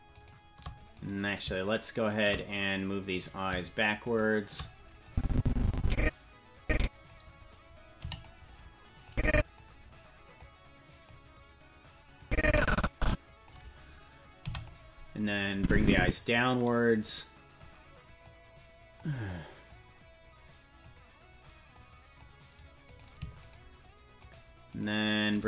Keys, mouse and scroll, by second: 0.7 right click, 1.1 right click, 3.3 right click, 4.2 shift+right click, 5.1-7.1 drag, 8.0 i, 9.1 click, 10.4 click, 12.2-13.5 drag, 14.4 i, 15.5 click, 16.9 click, 18.2 click, 19.7-20.9 drag, 21.7 click, 23.1 right click, 23.6 shift+right click.